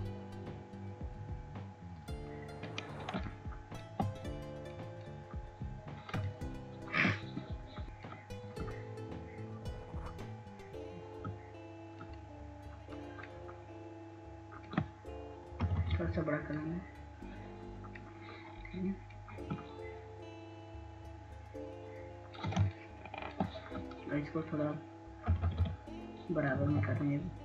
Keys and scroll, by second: 19.6 ], 19.8 ], 20.0 ], 24.6 ].